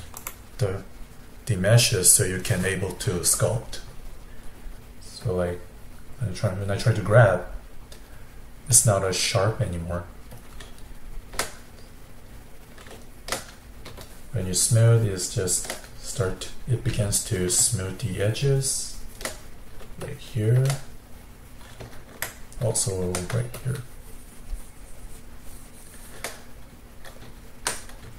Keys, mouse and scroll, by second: 3.5-5.3 middle drag, 5.3-7.5 drag, 7.5-8.8 middle drag, 8.8-11.0 drag, 11.0-14.0 shift+middle drag, 14.0-16.0 shift+drag, 16.0-17.0 middle drag, 17.0 f, 17.7-19.4 shift+drag, 19.4 middle click, 20.0 shift+click, 20.9-23.6 middle drag, 23.6-26.5 shift+drag, 26.5-28.1 middle drag.